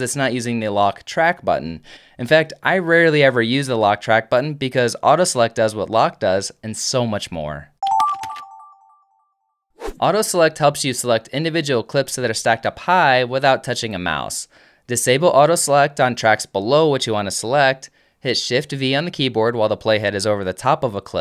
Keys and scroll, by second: 17.3 alt+F1, 17.8 alt+F2, 19.5 shift+v.